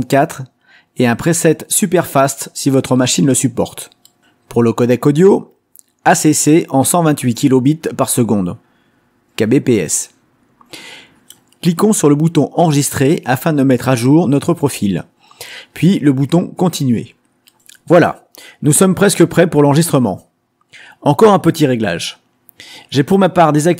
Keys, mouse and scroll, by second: 1.9 click, 2.2-14.6 middle drag, 14.6 click, 17.8 click, 20.1 click.